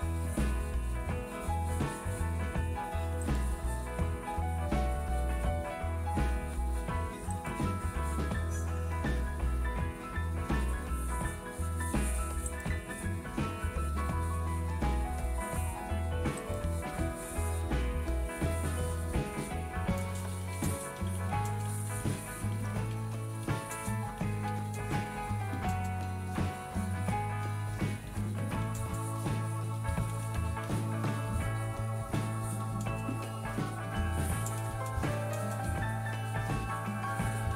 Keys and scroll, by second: 16.4 #, 17.5-37.5 typing.